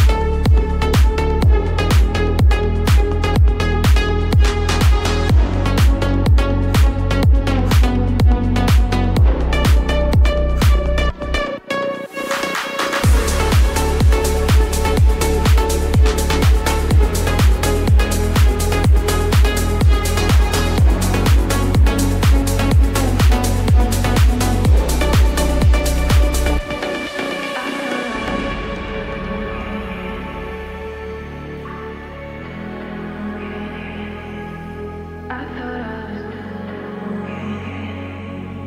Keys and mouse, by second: 1.6 middle click, 2.3 ctrl+n, 2.3 ctrl+b, 7.3 middle click, 9.0-10.5 shift+middle drag, 12.2-14.1 middle drag, 15.1 Tab, 15.5-16.2 middle drag, 16.5-17.5 shift+middle drag, 18.5 ctrl+s, 19.8-22.3 drag, 23.7-25.2 middle drag, 27.3 KP_3, 27.5 ctrl+z, 27.5 h, 27.5 g, 31.1 click, 32.2-32.6 shift+middle drag, 35.4 r.